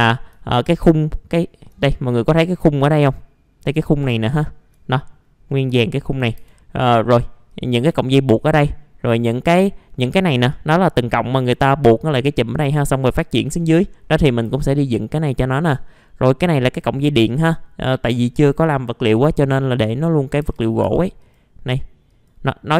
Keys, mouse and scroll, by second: 0.4 alt+middle click, 1.8-2.1 scroll up 1, 2.3 F4, 2.9 click, 3.6 scroll down 1, 4.2 alt+middle click, 5.8 alt+middle click, 6.3 F4, 7.0 middle click, 7.5 click, 8.1 alt+middle click, 8.7 middle click, 9.1 click, 9.4-9.9 scroll down 1, 9.9 middle click, 11.0 scroll down 1, 13.7-14.7 scroll up 1, 14.7 middle click, 16.0-16.9 scroll down 1, 17.3 middle click, 18.3 click, 19.6 alt+middle click, 20.4 F4, 21.2 click, 22.6 middle click.